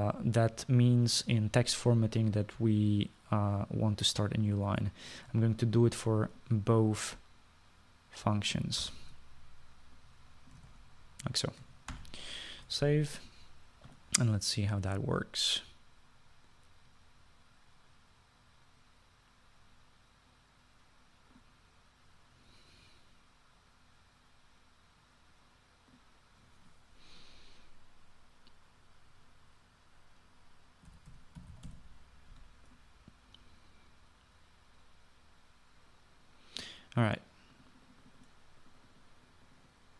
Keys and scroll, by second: 1.0 typing, 9.9 ctrl+c, 11.7 ctrl+v, 31.8-33.3 typing.